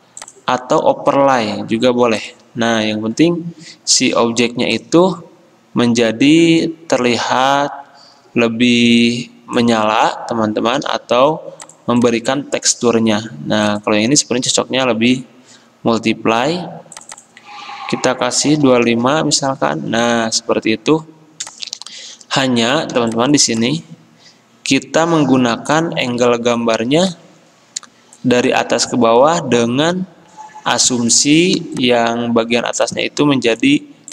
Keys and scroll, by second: 18.6 typing, 19.0 Return.